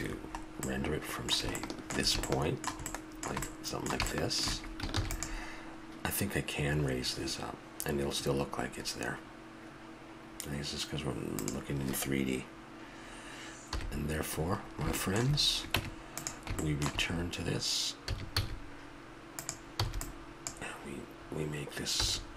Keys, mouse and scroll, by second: 0.0 Escape, 3.7-5.9 middle drag, 5.0 ctrl+s, 11.4-13.2 drag, 13.8 KP_1, 14.7-17.0 middle drag, 15.8 Tab, 18.1 a, 18.4 z, 19.8 b, 22.0 a.